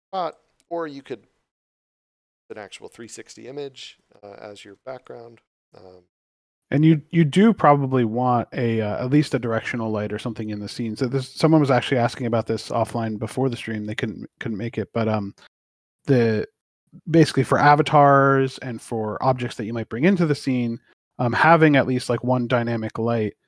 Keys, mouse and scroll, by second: 5.0 click, 7.7 click, 15.7 click.